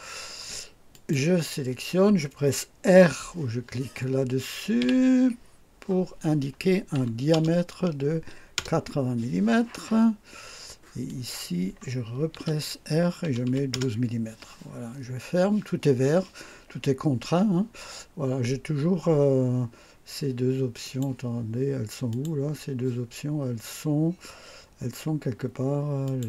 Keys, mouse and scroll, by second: 0.9 click, 4.8 r, 6.9 KP_8, 7.3 KP_0, 8.5 Return, 11.0 click, 12.3 r, 13.2 KP_1, 13.5 KP_2, 13.7 Return, 20.8 click, 22.1 click, 26.0 click.